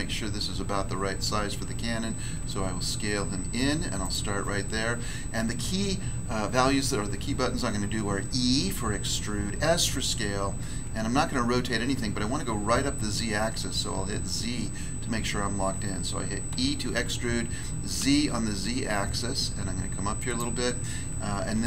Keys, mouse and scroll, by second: 2.4 s, 4.0 click, 16.5 e, 17.9 z, 20.1 click, 21.5 e.